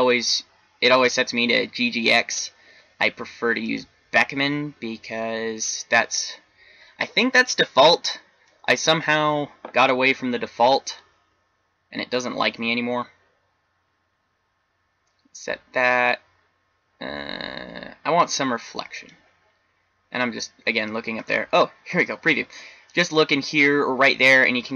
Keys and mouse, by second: 2.1 click, 12.1 click, 21.1 click.